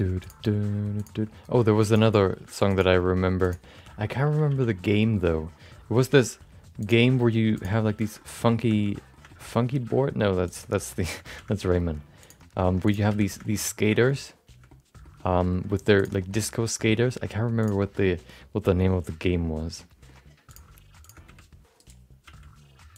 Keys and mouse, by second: 0.2 click, 1.0 shift+click, 1.8 click, 2.7 click, 3.4 shift+click, 4.2 middle click, 4.5 f, 4.9 middle click, 5.9 ctrl+z, 6.8 click, 7.5 shift+click, 7.8 f, 8.2 shift+middle click, 8.4 middle click, 8.8 middle click, 8.9 middle click, 9.3 shift+middle click, 9.5 middle click, 9.9 middle click, 10.4 click, 11.0 click, 11.2 f, 11.6 middle click, 12.2 click, 12.8 shift+click, 13.1 f, 13.4 middle click, 13.5 middle click, 13.9 middle click, 14.1 middle click, 14.7 middle click, 15.1 middle click, 15.9 click, 16.2 shift+middle click, 16.3 middle click, 16.8 middle click, 17.1 g, 17.9-20.1 middle drag, 20.5 click, 21.0 shift+click, 21.2 g, 22.2 f, 22.9 click.